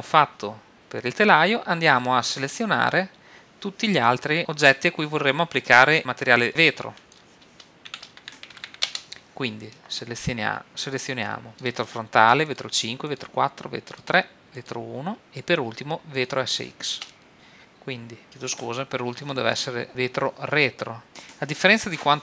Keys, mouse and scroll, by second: 7.0-8.9 drag, 11.5-15.2 drag, 16.1-18.3 drag.